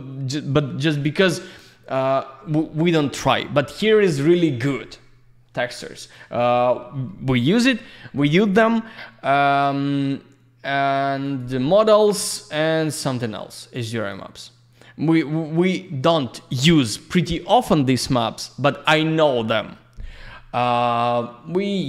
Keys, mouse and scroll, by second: 9.2 click, 11.2 click, 13.9 click, 20.9 click.